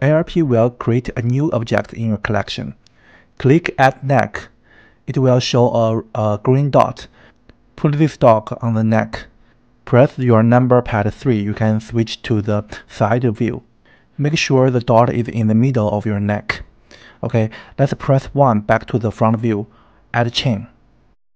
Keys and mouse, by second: 6.3 click, 8.3 click, 10.6 KP_3, 18.5 KP_1, 20.6 click.